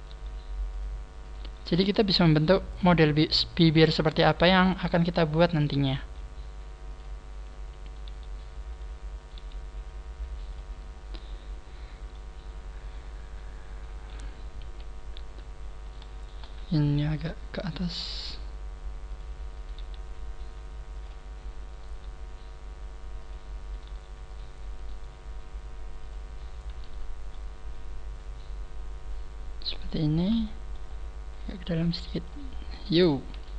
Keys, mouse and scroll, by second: 0.0 g, 0.8 click, 1.2 click, 1.2 right click, 1.8 click, 2.3 click, 2.3 g, 2.7 click, 4.0 g, 5.4 click, 5.8 right click, 6.0 g, 7.8 right click, 8.0 g, 8.7 click, 9.2 right click, 9.3 g, 10.4 click, 10.8-11.4 scroll down 6, 12.0 middle click, 14.6 KP_1, 15.1-15.6 scroll up 5, 15.8 right click, 16.1 shift+right click, 17.7 g, 19.1 click, 19.5 right click, 19.8 g, 21.1 click, 21.6 right click, 21.8 g, 23.6 click, 23.6 right click, 23.8 g, 24.7 click, 24.7 right click, 24.8 g, 26.3-27.2 scroll down 4, 26.8 Tab, 27.2 middle click, 29.8 scroll up 3, 30.3 Tab, 30.4 middle click, 30.8 scroll up 1, 31.4 click, 32.4-32.9 scroll down 5, 33.3 KP_1.